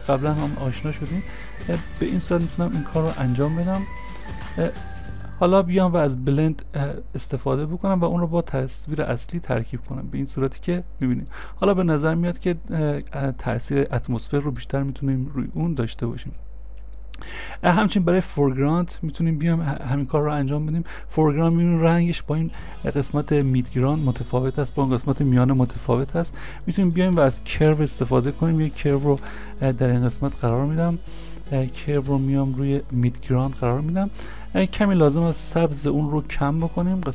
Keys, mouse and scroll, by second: 0.0 scroll down 1, 2.9 scroll up 1, 11.1 scroll up 1, 21.3 middle click, 27.7 c, 28.7 r, 29.0 v, 29.2 e.